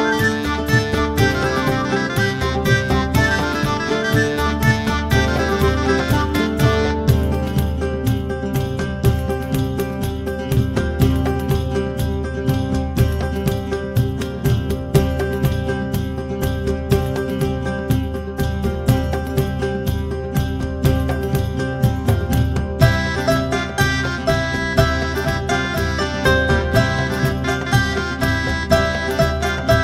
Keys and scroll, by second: 7.1 ctrl+alt+t, 9.2-11.4 typing, 12.4-16.5 typing, 16.6 Return, 17.5-19.0 typing, 19.1 Return, 25.2 Return.